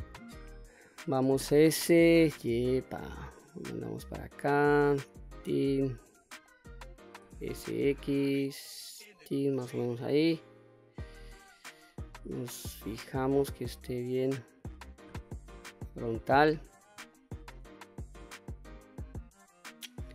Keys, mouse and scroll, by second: 0.1-0.4 shift+middle drag, 1.5 s, 2.0 y, 5.6 click, 6.2 middle click, 7.0 s, 7.3 x, 8.9 click, 10.0 click, 11.2-11.6 scroll up 1, 11.6-12.2 middle drag, 12.4-12.8 scroll down 2, 12.8-14.6 middle drag, 14.6-15.0 scroll down 1, 15.2 KP_1, 15.9 scroll up 2, 16.9-17.2 shift+middle drag, 17.9 click.